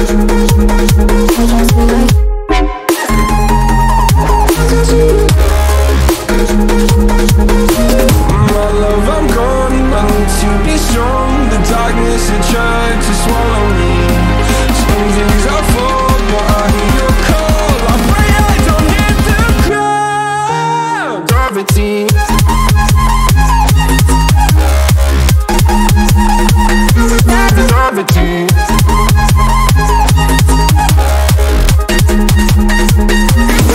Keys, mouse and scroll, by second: 6.0-9.8 drag, 11.9-15.3 drag, 15.3 x, 16.3-17.0 drag, 17.0 g, 18.7 g, 24.9 drag, 25.2 g, 27.5-28.5 drag, 28.5 g, 31.8 g.